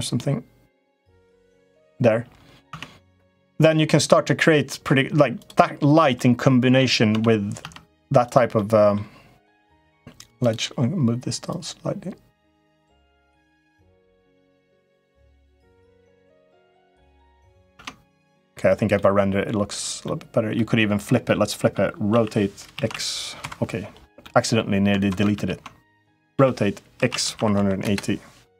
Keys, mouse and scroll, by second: 2.4 Tab, 3.4 click, 3.9 middle click, 5.2 click, 5.9 middle click, 6.9 Tab, 7.4 Tab, 8.0 click, 8.3 middle click, 10.2 click, 11.3-12.4 drag, 13.1 click, 14.0 middle click, 15.8-17.3 drag, 17.5 Tab, 18.7 middle click, 19.8 middle click, 21.0 middle click, 21.9 r, 22.5 x, 24.0 middle click, 25.2 ctrl+z, 26.1 r.